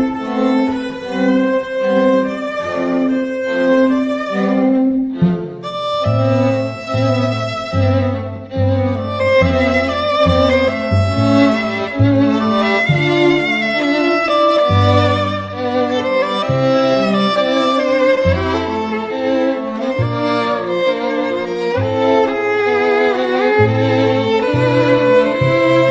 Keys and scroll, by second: 3.2 [, 5.9 ], 8.8 [, 9.4 ], 12.0 [, 14.2 [, 23.9 [, 24.2 [.